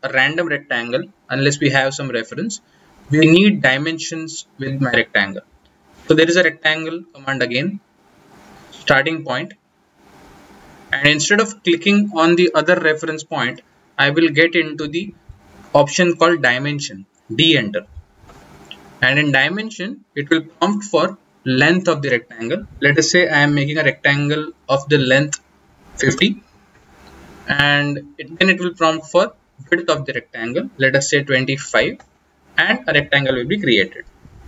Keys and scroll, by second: 0.8 Delete, 5.1-6.3 typing, 17.8 d.